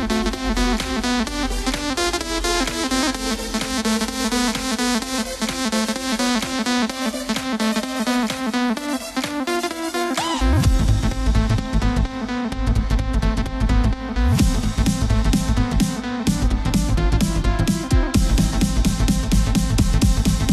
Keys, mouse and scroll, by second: 0.2 scroll down 2, 0.7 scroll up 1, 1.2-2.0 scroll down 2, 2.0 middle click, 2.8-3.3 scroll down 6, 3.3-6.2 middle drag, 6.2 KP_7, 7.5-8.7 scroll up 5, 8.7-9.4 scroll down 1, 9.4-9.9 scroll down 1, 9.9 z, 12.4 b, 13.1-16.2 drag, 17.6-20.1 drag.